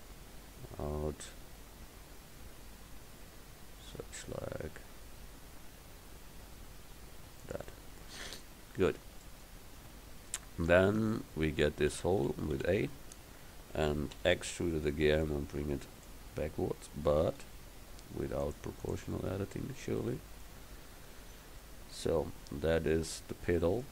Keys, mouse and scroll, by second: 8.3 a, 9.9 Tab, 10.9 Tab, 12.0 a, 12.3 a, 12.6 a, 14.2 e, 15.3-17.4 drag, 17.5 ctrl+z, 18.5-20.7 drag, 22.9 Tab.